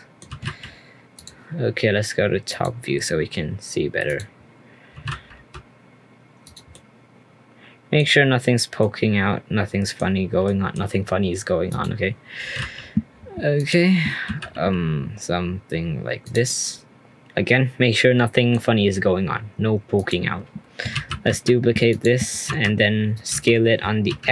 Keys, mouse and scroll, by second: 0.3 g, 2.5 click, 4.0 click, 4.9 g, 6.7-8.0 middle drag, 8.0-8.8 scroll down 1, 8.8-11.7 middle drag, 11.7 click, 12.4 g, 14.2 g, 16.4-19.6 middle drag, 19.9 click, 20.9 shift+d, 22.4 r, 23.3 s.